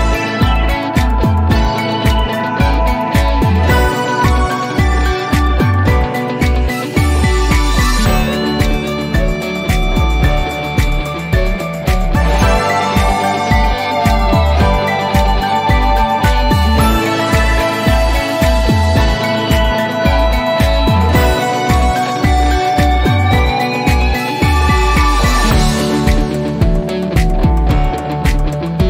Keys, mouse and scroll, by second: 1.2 click, 3.0 click, 10.9 click, 14.6-16.3 scroll down 1, 17.9-19.1 drag, 19.9 typing, 22.0 typing, 28.1 click.